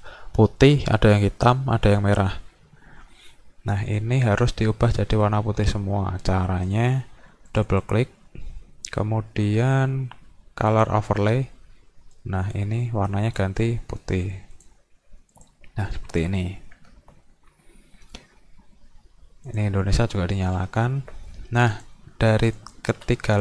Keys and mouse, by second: 7.5 click, 7.7 click, 10.7 click, 12.1 click, 13.1 click, 14.6 click, 15.3 click, 16.2 click, 19.5 click, 21.7 click, 22.6 shift+click, 23.3 click.